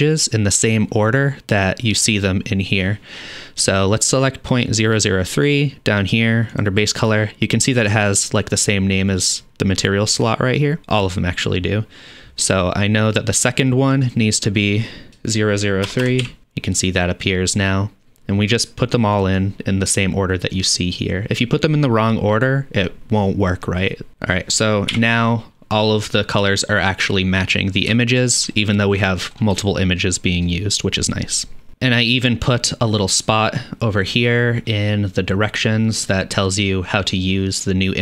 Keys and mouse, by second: 4.1 click, 6.5 click, 14.1-16.4 drag, 16.1 KP_0, 21.1-25.8 drag, 21.4 KP_0, 22.3 KP_0, 23.1 KP_0, 25.3 n, 25.8-26.4 middle drag, 29.0-38.0 drag.